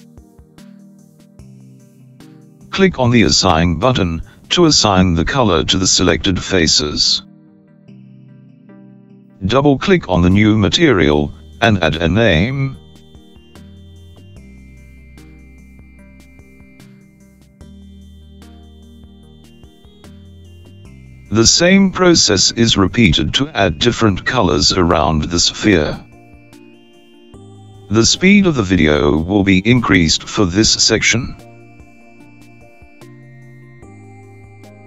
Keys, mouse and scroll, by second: 5.0 click, 7.1-10.9 middle drag, 11.7 click, 12.0-15.7 drag, 24.8-28.4 middle drag, 29.2 alt+click, 30.4 alt+shift+click, 32.2 alt+shift+click, 33.3 alt+shift+click, 34.3 alt+click.